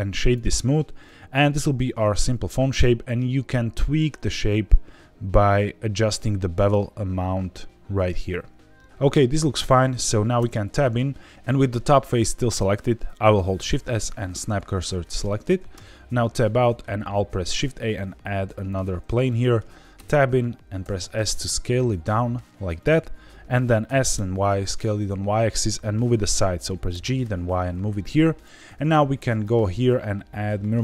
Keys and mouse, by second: 1.0-2.1 middle drag, 4.3-8.9 shift+drag, 10.3 Tab, 13.5 shift+s, 15.7 Tab, 17.1 shift+a, 19.2-19.6 middle drag, 19.9 Tab, 20.8 s, 22.7 click, 24.1 y, 26.2 click, 26.9 g, 27.2 y, 28.3 click, 29.3-30.8 drag.